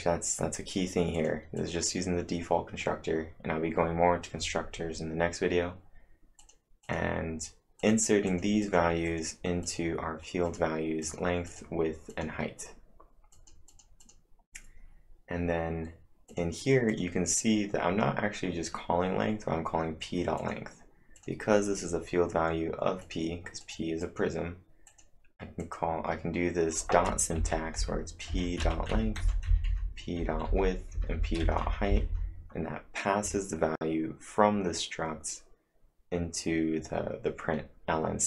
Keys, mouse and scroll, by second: 1.2 click, 1.4-2.1 typing, 3.7-4.4 typing, 6.4 click, 6.9 click, 7.8 click, 8.3 click, 8.7 click, 9.1 click, 9.7 click, 10.5 click, 10.8-11.5 typing, 11.1 click, 12.1 click, 13.4 click, 13.7 click, 14.1 click, 16.3 click, 16.9 click, 20.2-20.9 typing, 20.4 click, 21.2 click, 23.1 click, 23.6 click, 24.0 click, 24.9 click, 25.6 click, 27.4 Right, 27.5-29.1 typing, 28.3 Right, 29.2 Down, 29.5 Left, 29.7 Left, 30.2 Right, 30.5 Down, 31.0 Left, 31.2 Left, 31.4 Right, 31.7 Right, 31.9 Left, 32.1 Left, 33.9-34.6 typing.